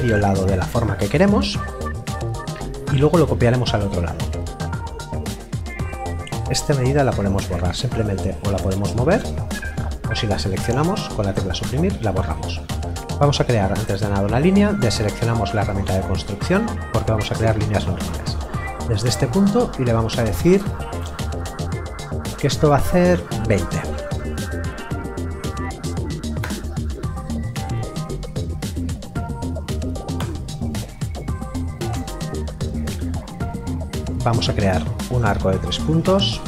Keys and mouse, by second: 6.5 click, 11.8 Delete, 14.7 click, 23.6 KP_2, 23.7 KP_0, 26.4 Return, 30.2 Return, 34.0 click.